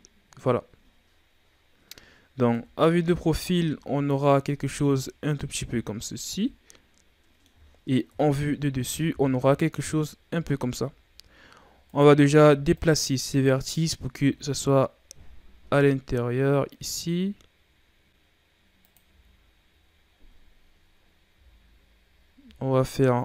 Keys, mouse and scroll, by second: 2.4 KP_3, 2.9 a, 3.5-4.7 scroll down 7, 4.7-6.4 scroll up 11, 6.4-8.0 middle drag, 8.0 KP_7, 9.1-10.3 ctrl+scroll up 5, 10.3 z, 10.8-11.8 ctrl+scroll down 1, 11.8 right click, 12.2 c, 14.1 g, 19.0 z, 20.0-20.9 scroll down 1, 20.9-21.3 scroll up 5, 21.3 z, 22.3 g.